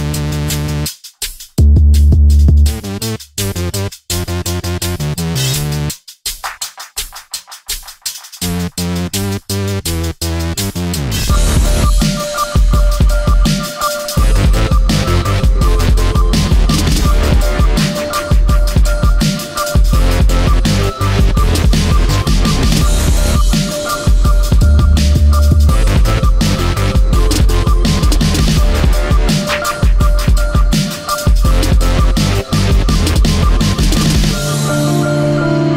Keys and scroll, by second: 2.6 space, 10.5 space, 12.5 space, 14.9 i, 15.8 v, 18.3 ].